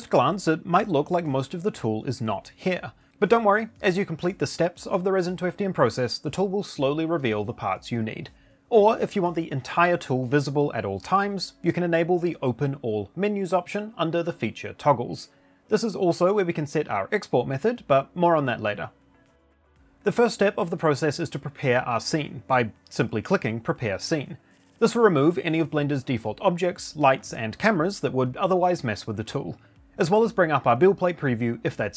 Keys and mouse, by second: 9.6 click, 12.4 click, 13.1 click, 14.7 click, 16.5 click, 21.8 click, 22.6 click, 23.8 click.